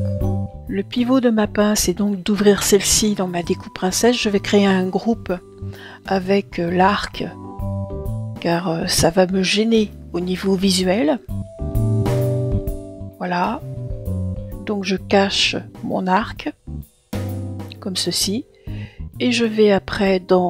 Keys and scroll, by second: 6.7 Return.